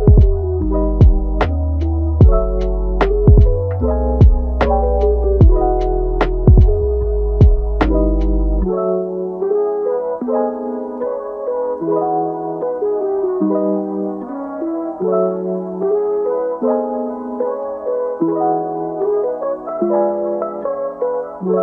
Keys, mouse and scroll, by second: 0.6 click, 0.9 Tab, 2.3 g, 3.7 alt+s, 4.7 click, 5.1 alt+s, 6.7 click, 7.1 alt+s, 7.9 g, 9.2 click, 10.1 click, 10.8 alt+s, 13.4 click, 14.3 g, 15.3-16.8 middle drag, 16.8-18.2 scroll up 1, 18.2 middle click, 18.9 a, 19.3-20.4 middle drag, 20.4 ctrl+t, 21.5-21.6 middle drag.